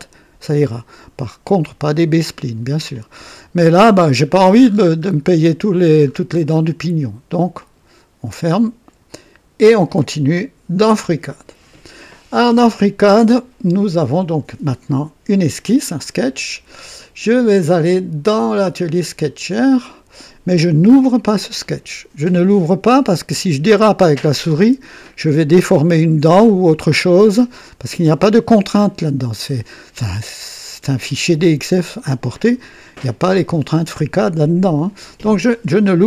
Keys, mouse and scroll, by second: 4.2-5.3 scroll down 6, 6.0-6.5 scroll down 2, 7.6 click, 9.1 click, 10.7 click, 17.8 click, 19.4 click.